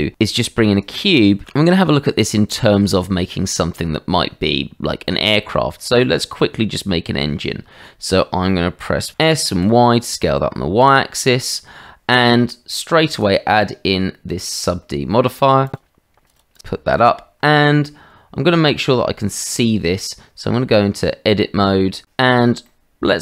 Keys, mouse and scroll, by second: 1.4 g, 5.5-5.8 drag, 6.1 shift+middle drag, 8.4-9.1 drag, 9.1 s, 11.2-11.6 drag, 16.2 click, 16.5 click, 17.5 shift+middle drag, 20.3 Tab, 22.7-23.2 middle drag.